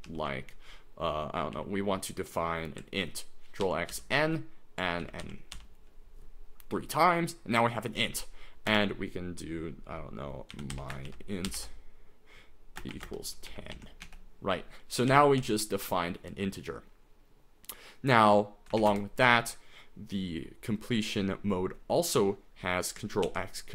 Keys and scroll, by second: 0.1 ctrl+t, 1.5 i, 3.7 ctrl+x, 3.9 ctrl+n, 5.0 ctrl+n, 5.2 ctrl+n, 5.5 ctrl+n, 8.7 space, 10.3-15.4 typing, 18.8 shift+a, 18.9 Return, 23.2 ctrl+x.